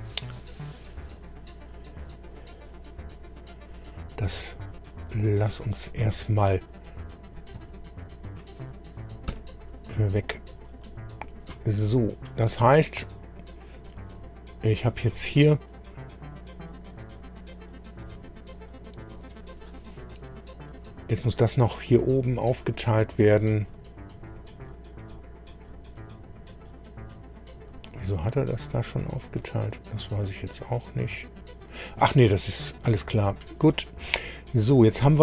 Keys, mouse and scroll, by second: 6.5 click, 7.2 click, 8.3 shift+click, 9.3 Delete, 10.8 click, 14.1 click, 16.3 click, 25.0-26.1 middle drag, 28.9 scroll down 2, 29.4-32.9 middle drag, 34.5 scroll up 2.